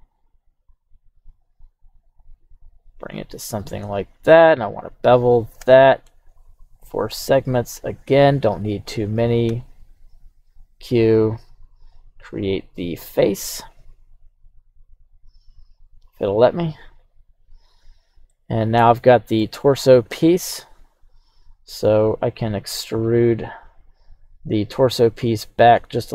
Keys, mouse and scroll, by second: 11.6 click, 16.1-17.4 drag, 18.3-19.4 middle drag, 19.6-20.5 scroll down 1, 20.5 scroll down 1, 20.5 KP_3, 22.7 e.